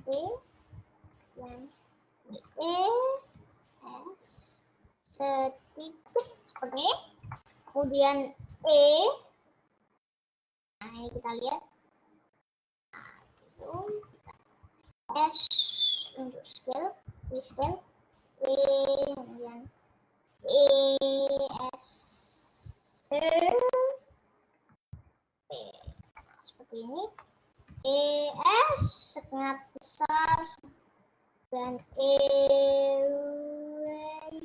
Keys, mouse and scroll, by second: 0.0 e, 2.7 e, 3.4 s, 6.7 middle click, 7.1-7.4 scroll up 1, 7.4 shift+middle click, 8.3 scroll down 1, 8.6 e, 13.7 e, 14.0 ctrl+z, 16.0 s, 16.5-17.1 scroll up 1, 17.1 scroll down 1, 17.6 e, 20.5 e, 21.6 s, 23.2 e, 26.2-27.8 middle drag, 27.8 e, 28.5 s, 31.7 e.